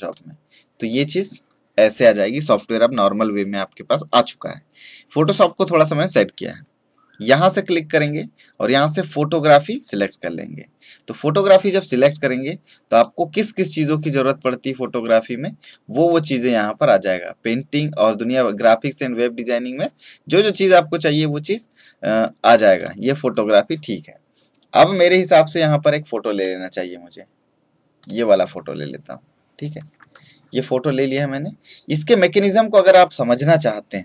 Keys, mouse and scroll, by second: 0.0 click, 7.9 click, 12.9 click, 15.6 click, 22.7 click, 26.3 click.